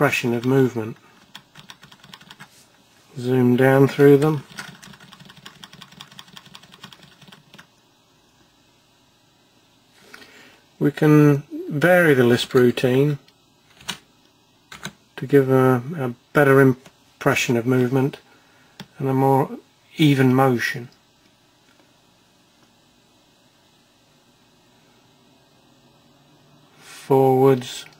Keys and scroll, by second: 0.1 F1, 4.5 F1, 5.8 F9, 6.0 F8, 6.2 F7, 6.3 F6, 6.5 F5, 6.6 F4, 6.8 F3, 7.0 F2, 16.9 F1.